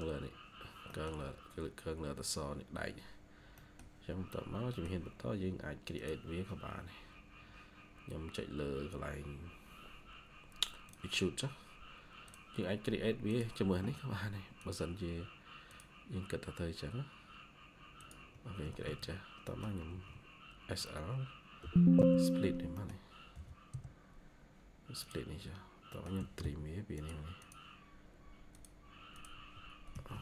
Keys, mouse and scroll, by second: 0.8 middle click, 3.5 middle click, 4.6 middle click, 18.5 Escape, 18.7 Escape, 19.4 middle click, 19.8 typing, 21.5 typing, 22.6 middle click, 23.2-25.1 typing, 24.4 scroll up 1, 25.8 middle click, 27.3 double click, 29.8 Escape, 30.0 Escape.